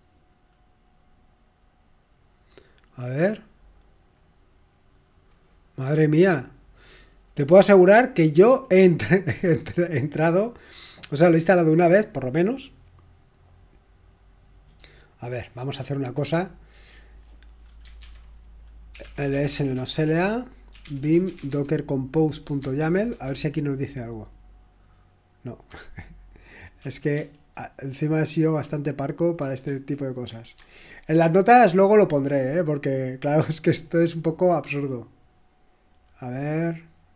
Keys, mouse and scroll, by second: 0.3-0.8 scroll down 2, 0.8-1.5 scroll down 1, 2.1-2.5 scroll down 2, 3.1-3.9 scroll down 2, 5.3-5.8 scroll down 2, 5.8-6.8 scroll down 1, 6.8-7.6 scroll up 2, 7.9-8.6 scroll up 2, 8.6-9.0 scroll up 1, 9.4-9.9 scroll up 2, 9.9-10.3 scroll up 1, 12.0 scroll up 1, 13.2-13.7 scroll up 1, 18.0 ctrl+c, 18.7-24.9 typing, 26.8-27.1 typing, 29.4-32.3 typing, 30.6 super+1, 35.3-35.8 scroll down 1, 35.5-36.3 typing.